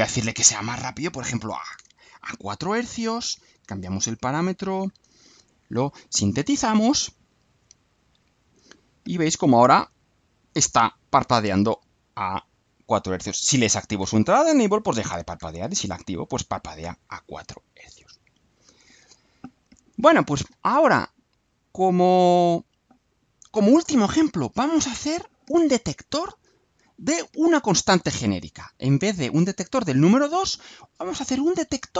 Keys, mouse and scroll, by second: 0.4 click, 1.7 BackSpace, 3.3 click, 4.8 ctrl+u, 28.9 click.